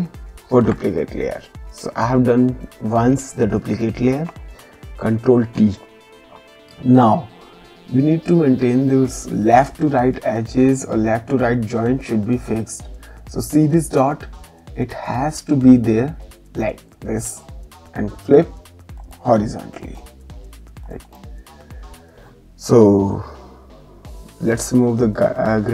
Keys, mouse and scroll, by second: 0.4 ctrl+j, 5.1 ctrl+t, 11.8 click, 17.3 right click, 19.0 click, 20.8 click.